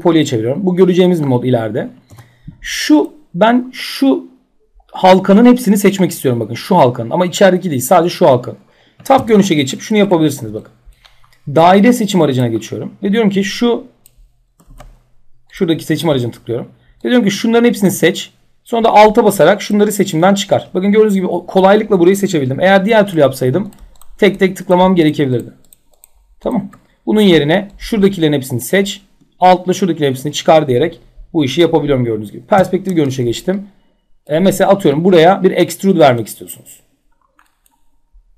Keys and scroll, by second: 1.6 4, 8.7 t, 14.2 ctrl+z, 32.1 p.